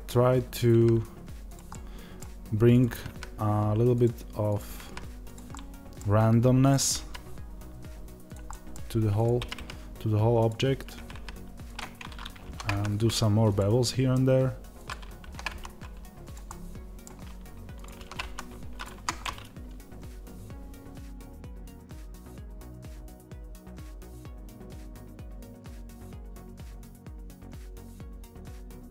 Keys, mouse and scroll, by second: 1.4 click, 1.6-2.6 middle drag, 2.6-5.2 drag, 5.4-6.5 middle drag, 6.5-8.4 drag, 8.4 middle click, 9.0-11.6 drag, 12.3 ctrl+b, 13.4 click, 13.7 middle click, 14.6 click, 15.1 ctrl+b, 16.2 click, 16.3-17.6 middle drag, 17.6 click, 17.8 ctrl+b, 18.7 click, 18.8 Tab, 19.1-25.4 middle drag, 22.6 z, 23.1 Tab, 24.4 scroll up 2, 24.6 scroll down 2, 24.8 Tab, 25.4 click, 25.6 ctrl+b, 26.2 click, 26.3 middle click, 26.9 click, 27.1 ctrl+b, 27.7 click, 27.8-28.9 middle drag.